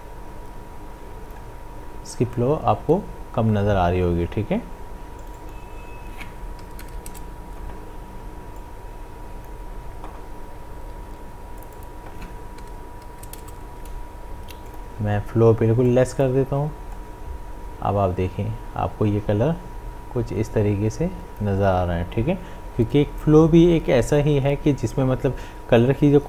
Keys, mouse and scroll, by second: 5.2 click, 8.6-10.6 drag, 10.6 ctrl+z, 11.6 click, 14.6-23.8 drag.